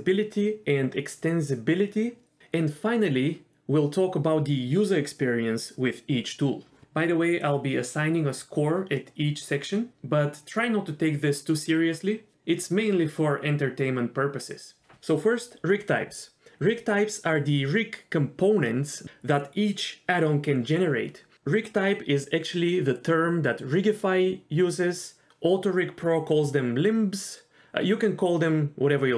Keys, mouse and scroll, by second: 0.3 middle click, 0.3 Tab, 0.5 Tab, 0.9 click, 3.5 shift+click, 4.3 h, 4.8 click, 5.1 Tab, 5.4 KP_1, 6.6 click, 7.2 l, 7.9 s, 8.7 scroll up 2, 8.8 shift+middle click, 9.0 g, 9.3 r, 9.6 s, 11.1 click, 11.2 g, 11.5 click, 11.6 g, 11.9 click, 12.3 g, 13.7 click, 13.7-15.2 typing, 14.6 scroll up 1, 14.9 click, 15.1 click, 15.4 click, 16.5 scroll up 1, 17.2-18.1 scroll up 3, 18.3 shift+middle click, 22.7 click, 23.1 g, 23.8 click, 24.1 g, 26.6-27.1 scroll down 2.